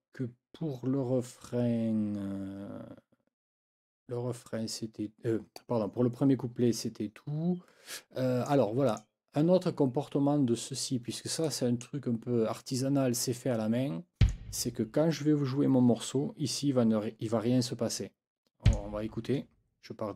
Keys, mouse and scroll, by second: 8.0 click, 8.9 click, 11.4 click, 12.7 click, 14.2 click, 18.6 click.